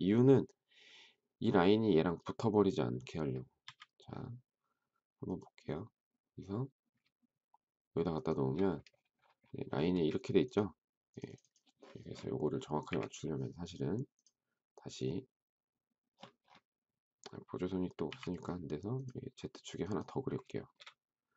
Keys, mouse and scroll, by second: 3.6 m, 8.1 shift+click, 9.9 space, 12.6 Delete, 18.0 t, 20.5 shift+middle click.